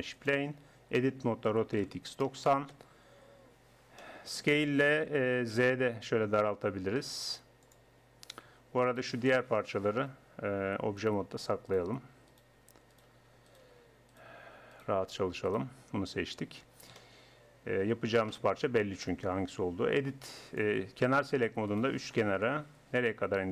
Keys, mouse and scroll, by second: 0.8 Tab, 1.5 r, 5.1 s, 8.5 Tab, 8.9-10.7 right drag, 10.8-15.0 typing, 11.1 right click, 16.0 Tab, 17.0 middle click, 20.5-21.7 drag, 21.7 middle click, 22.2 click, 22.4-23.5 middle drag.